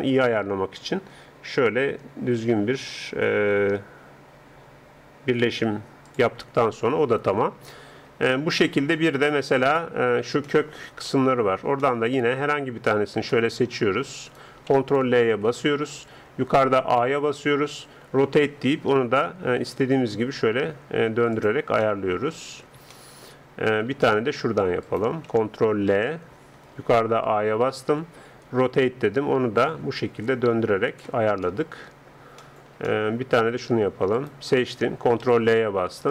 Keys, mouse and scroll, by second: 0.9 r, 6.8-14.2 middle drag, 14.2-15.2 drag, 15.2-16.2 right drag, 15.4 ctrl+l, 17.0 a, 18.0 r, 21.9-24.8 middle drag, 24.8-26.6 right drag, 25.9 ctrl+l, 27.3 a, 28.5 r, 31.8-35.2 middle drag, 34.2-36.0 right drag, 35.2 ctrl+l.